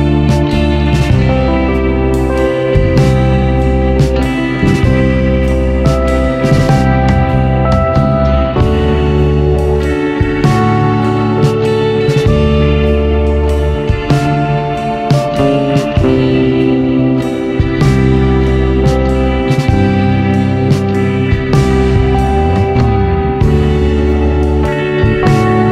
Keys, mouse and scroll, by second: 2.2-8.4 drag, 9.1-10.5 scroll down 14, 12.4-15.2 drag, 16.6 click, 17.8-19.0 scroll down 4, 19.1 click, 21.0-22.9 drag, 25.0 click, 25.6-25.7 scroll up 5.